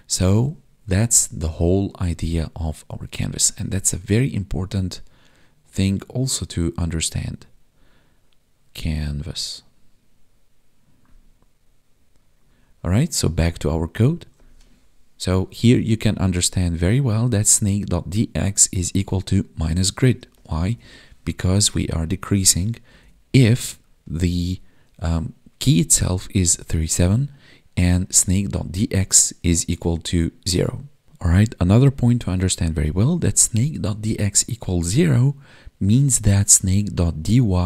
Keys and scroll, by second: 20.7 Tab, 23.1 Tab.